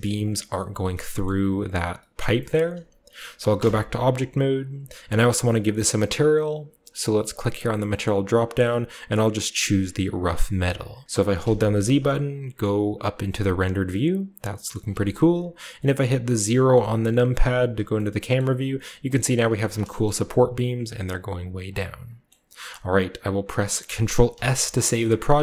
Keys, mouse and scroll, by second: 0.0-0.7 typing, 0.1 middle click, 0.7-2.3 scroll down 1, 1.2-2.3 middle drag, 2.4-4.5 shift+middle drag, 3.5 Tab, 4.5-6.6 scroll up 1, 7.5 click, 10.1 click, 11.3-11.9 typing, 13.3 typing, 13.6-15.3 scroll up 1, 14.6-16.4 middle drag, 15.3-16.4 scroll up 1, 16.4 KP_0, 17.6 shift+middle drag, 17.6-19.0 scroll down 1, 18.3-19.8 shift+middle drag, 19.5 a, 23.4 click, 24.2 ctrl+s.